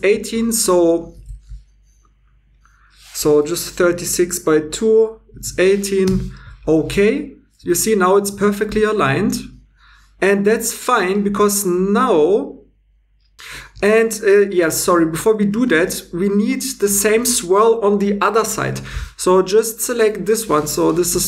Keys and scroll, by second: 5.3 typing, 6.1 Return, 14.4 super+z, 21.0 r.